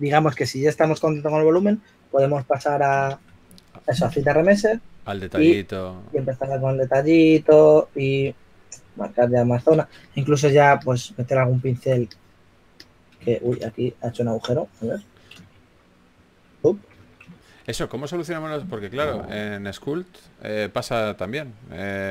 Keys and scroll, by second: 3.5-4.9 typing, 6.2 d, 13.6 shift+f, 16.0 shift+d, 18.4 shift+f, 19.7 typing.